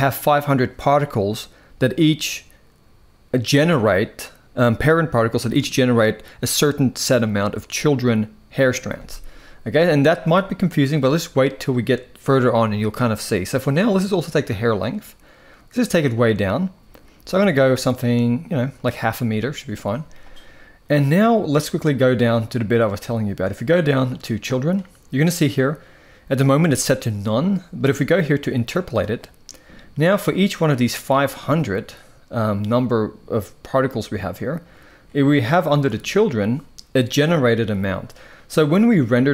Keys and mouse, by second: 14.5-18.5 drag, 24.2 click, 28.4 click.